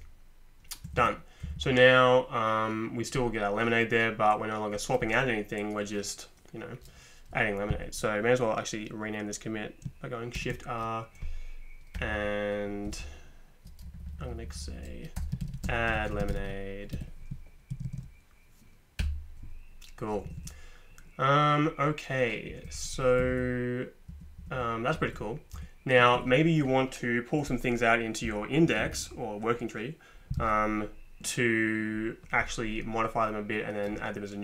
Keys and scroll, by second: 0.9 Right, 1.0 Right, 1.4 Up, 1.6 Up, 10.4 shift+r, 12.0 i, 12.1 i, 12.8 BackSpace, 13.0 Delete, 13.3 Delete, 13.4 Delete, 13.5 Delete, 14.3 Delete, 15.1-17.8 typing, 19.0 Return, 20.3 Right, 20.4 Right, 23.2 Down, 23.3 Down, 24.1 Up, 24.4 Up, 24.6 Up, 24.9 Down, 25.5 Up, 26.2 Down.